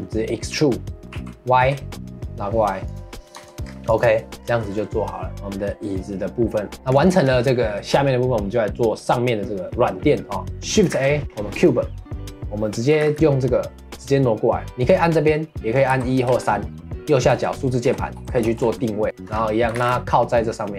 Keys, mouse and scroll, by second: 1.1 e, 3.3 Tab, 3.6 scroll down 2, 3.9 click, 4.1 middle drag, 4.4 scroll down 1, 4.6-6.4 middle drag, 6.9 click, 7.1-10.9 shift+middle drag, 10.9 shift+a, 12.9 g, 14.7 click, 15.9 KP_1, 17.3 KP_2, 19.0 shift+middle drag, 19.3-19.7 scroll up 1, 19.7 g.